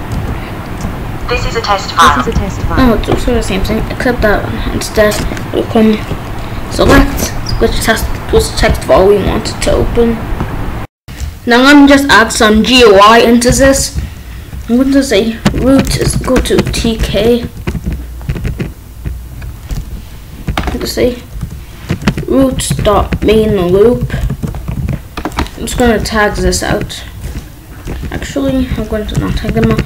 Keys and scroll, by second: 0.1 Return, 3.8 ctrl+b, 7.5 Up, 11.7 Down, 13.4 Return, 13.9 Up, 15.1-17.5 typing, 17.6 ctrl+s, 19.9 Down, 21.3 Return, 21.7-24.7 typing, 25.7 ctrl+/, 26.1 Down, 26.4 ctrl+/, 26.6 ctrl+s, 28.0 ctrl+/, 28.3 Up, 28.5 ctrl+/, 28.9 Up, 29.1 Return, 29.2-29.8 typing.